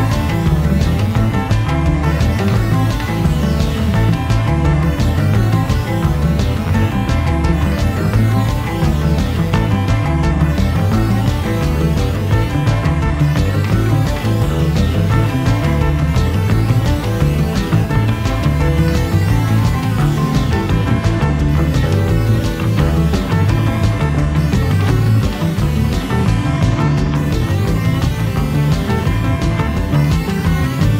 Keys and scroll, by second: 21.6 1, 25.9 0, 26.0 ., 27.4 8.